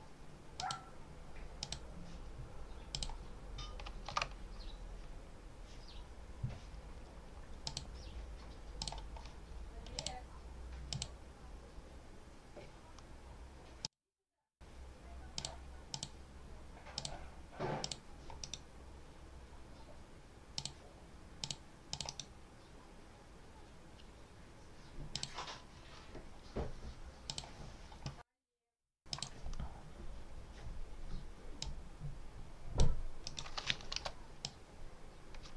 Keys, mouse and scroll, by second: 0.4 click, 1.5 click, 2.8 click, 4.1 alt+Tab, 7.5 click, 8.7 click, 9.8 click, 10.8 click, 13.7 click, 15.2 click, 15.8 click, 16.8 click, 17.7 click, 18.3 right click, 20.4 click, 21.3 click, 21.8 click, 22.0 right click, 25.0 click, 27.2 click, 29.0 click, 31.5-32.8 drag, 33.1 right click, 33.8 h, 34.3-35.5 drag.